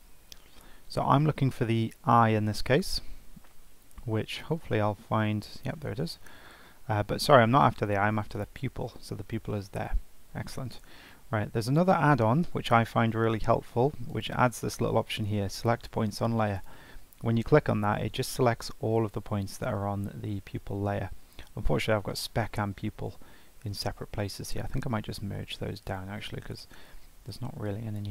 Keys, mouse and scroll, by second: 2.8-3.5 scroll up 3, 3.5-5.5 scroll down 7, 5.5 click, 8.3 click, 10.9-12.6 right drag, 16.6 right click, 24.4 click, 25.8-28.1 drag.